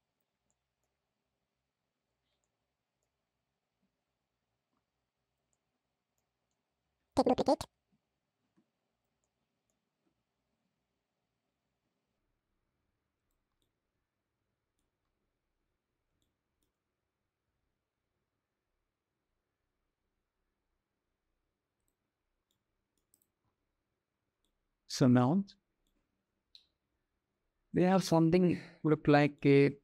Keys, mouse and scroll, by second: 0.3-0.6 middle drag, 1.1 g, 2.3-2.8 middle drag, 3.6 g, 5.3 middle drag, 5.5-6.0 drag, 7.7 shift+d, 9.0-9.5 drag, 9.8 x, 11.4 g, 13.2-14.4 drag, 15.8-16.2 shift+drag, 17.1 g, 22.1-22.6 middle drag, 24.0-24.8 middle drag, 25.4-27.7 middle drag, 29.0-29.8 middle drag.